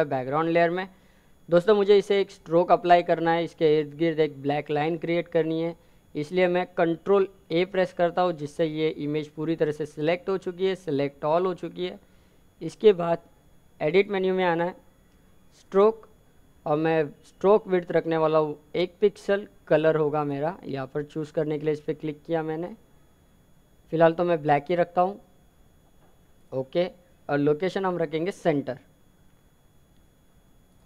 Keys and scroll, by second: 3.4 ctrl+a.